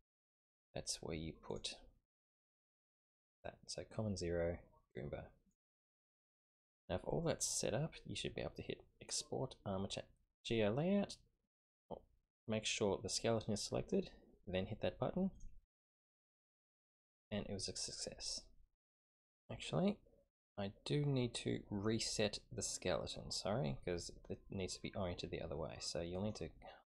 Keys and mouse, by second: 1.5 click, 2.6-5.6 drag, 15.3 click, 15.5 typing, 19.0 Home, 19.0 space, 26.1 click.